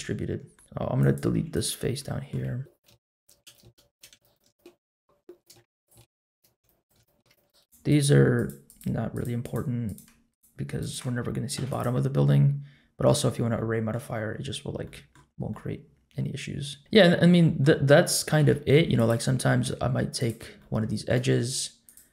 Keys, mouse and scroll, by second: 0.5 Tab, 0.5-0.8 scroll down 1, 1.0 click, 1.3 3, 1.5 click, 2.0 middle click, 2.8 shift+click, 2.9 middle click, 3.2 shift+click, 3.5 shift+click, 3.6 middle click, 3.9 shift+click, 4.1 x, 4.3 click, 4.4 x, 4.6 middle click, 4.8 x, 5.4 shift+click, 5.5 middle click, 5.8 shift+click, 5.9 shift+middle click, 6.1 middle click, 6.3 shift+click, 6.5 x, 6.8 click, 6.9 x, 7.2 middle click, 7.3 shift+click, 7.6 shift+click, 7.9 shift+click, 8.3 shift+click, 8.6 shift+click, 9.1 shift+click, 9.4 shift+click, 9.8 shift+click, 10.3 shift+click, 10.8 shift+click, 11.5 x, 12.2 middle click, 13.2-13.9 scroll down 2, 13.5 middle click, 14.5-14.8 scroll up 2, 14.8 middle click, 15.5-17.2 middle drag, 17.4 middle click, 18.3 2, 18.9 click, 20.1 shift+click, 20.6 middle click, 21.8 shift+click.